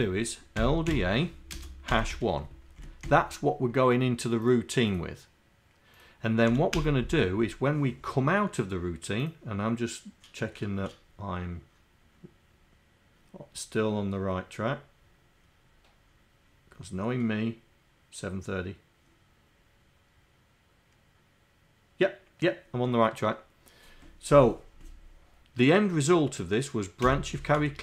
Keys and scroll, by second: 27.1 n, 27.4 v.